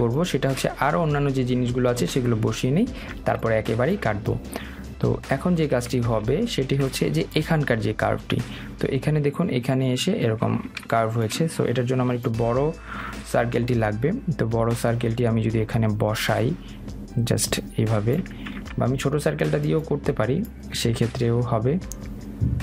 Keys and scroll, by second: 19.3 ctrl+z.